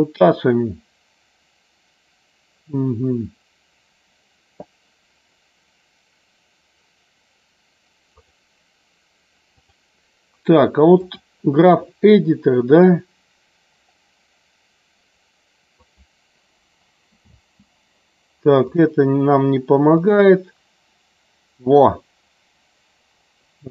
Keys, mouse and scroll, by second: 8.2 click, 9.6-11.2 drag, 17.3 space, 18.7 click.